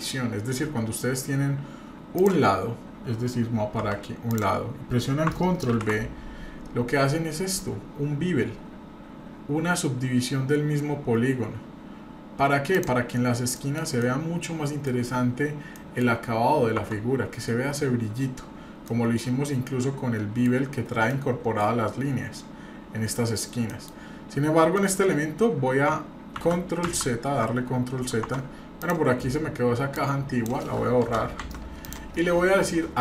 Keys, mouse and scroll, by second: 0.1-0.7 scroll up 2, 0.7-2.1 scroll down 1, 2.1 click, 3.8 2, 4.3 click, 5.7 ctrl+b, 13.5 middle click, 14.0 middle click, 15.3 scroll up 1, 15.7 middle click, 16.0 scroll down 1, 16.6 scroll down 1, 16.8 Tab, 17.1 scroll up 1, 18.3-18.9 scroll down 2, 18.9 middle drag, 19.2-19.7 scroll down 2, 19.7-20.4 middle drag, 20.6 scroll up 2, 21.1 middle click, 21.9 scroll down 2, 22.4 scroll up 1, 23.4 scroll up 1, 23.7 middle click, 24.0-24.6 scroll up 2, 24.7 middle click, 25.0-25.3 scroll down 2, 25.5 scroll up 1, 26.4 ctrl+z, 26.8 ctrl+z, 28.2 Tab, 28.8 click, 29.9 click, 31.0 Return, 31.5 Delete, 31.8 click.